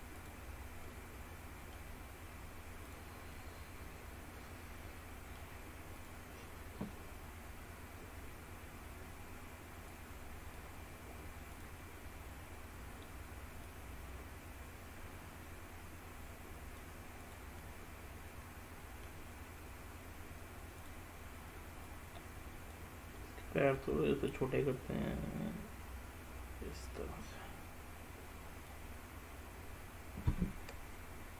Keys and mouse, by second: 0.3 click, 0.9 middle click, 3.4-5.5 middle drag, 10.0 click, 11.6 click, 13.8-16.9 drag, 17.3 click, 17.7-19.2 middle drag, 20.9 click, 22.0 click, 23.3 middle click, 24.8-28.8 drag.